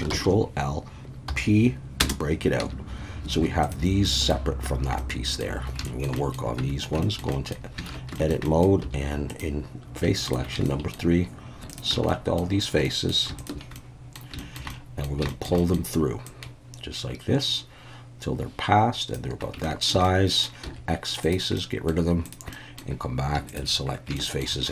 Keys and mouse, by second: 0.1 ctrl+l, 1.3 p, 2.6 Tab, 3.3 alt+a, 3.7-4.0 drag, 4.0 middle click, 5.0-5.4 middle drag, 5.8 shift+middle click, 6.2 middle click, 6.6 Tab, 7.0 shift+middle click, 7.3 middle click, 7.9 alt+a, 8.1 shift+middle click, 8.4 middle click, 8.8 3, 10.2 shift+click, 10.6 shift+middle click, 11.7 shift+click, 12.1 middle click, 12.8 middle click, 13.4 shift+click, 13.8 middle click, 14.4 shift+middle click, 14.7 middle click, 15.3 shift+middle click, 15.6 middle click, 16.3-19.1 drag, 19.6 shift+middle click, 20.0 middle click, 20.6 x, 21.6 middle click, 22.3 click, 22.5 middle click, 24.2 shift+middle click.